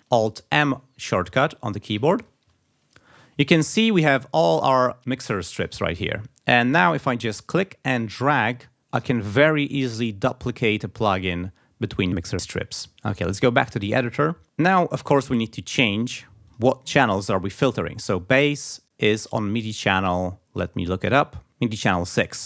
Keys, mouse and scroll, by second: 6.4 click, 8.0-9.2 drag, 9.7-11.3 drag, 13.9 click, 16.5 click, 17.1 click.